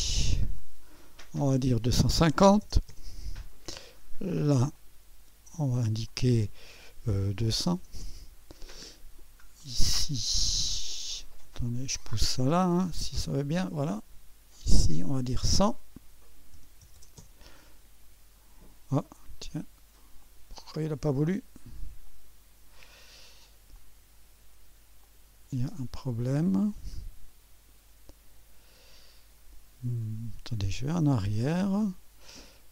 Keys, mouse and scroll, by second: 0.6 click, 2.2-3.1 typing, 4.8-5.8 drag, 6.1 click, 6.9 click, 6.9-7.8 typing, 8.0 Return, 9.2 middle click, 9.7-10.9 drag, 12.0-13.2 drag, 14.2 typing, 16.6-17.2 typing, 20.2-21.3 drag, 22.1-23.2 drag, 24.7 click, 25.1-26.1 drag, 26.1-29.7 scroll down 1, 30.9-32.0 drag.